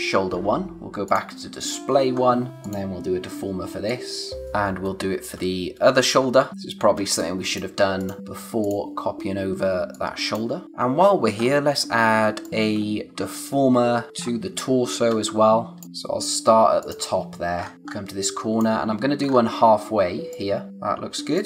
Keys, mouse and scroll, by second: 2.1-2.5 scroll up 1, 2.5 click, 4.1 click, 4.8 space, 6.3 scroll up 1, 7.0 space, 7.2 click, 7.5 space, 8.0 click, 8.6 click, 9.7 space, 9.9 click, 10.2 space, 11.0 scroll down 1, 11.4-12.4 scroll up 1, 12.4 click, 13.1-13.4 scroll down 1, 13.5 space, 14.1-14.5 scroll up 1, 14.5 space, 15.1 scroll up 1, 15.8-16.6 scroll up 1, 16.8 click, 17.5-18.1 scroll down 1, 18.1 space, 18.2 click, 18.6 space, 19.2-20.3 scroll up 1, 20.3 click, 20.9 space, 21.3 click.